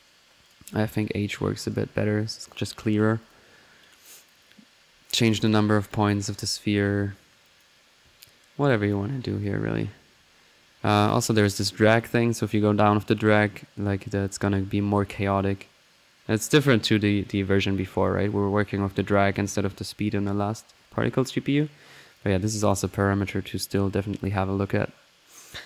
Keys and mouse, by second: 0.4-1.9 drag, 2.3 click, 3.2-6.2 drag, 7.4-8.8 drag, 8.8-10.5 drag, 10.5 middle click, 11.0 click, 11.9-18.8 drag, 20.9-23.4 drag, 23.6 middle click, 24.2 click, 24.7 click, 25.4 click.